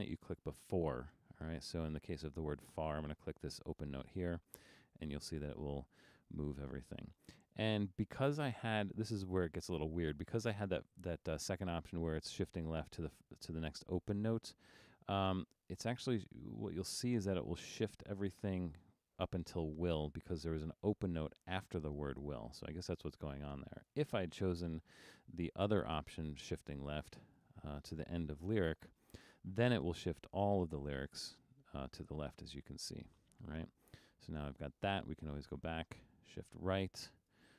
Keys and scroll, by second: 7.6 super+z, 22.1 super+z.